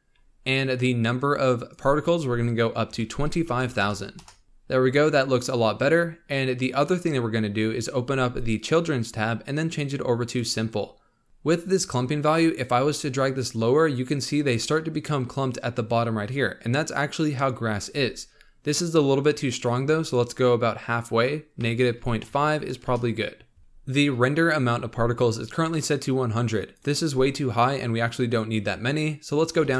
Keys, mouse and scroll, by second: 0.1-1.7 scroll up 7, 1.7-3.6 drag, 3.6 KP_0, 4.4-5.9 middle drag, 5.9-7.6 scroll down 18, 8.3-10.4 drag, 12.4-15.5 drag, 19.4-22.5 drag, 26.7-29.7 drag.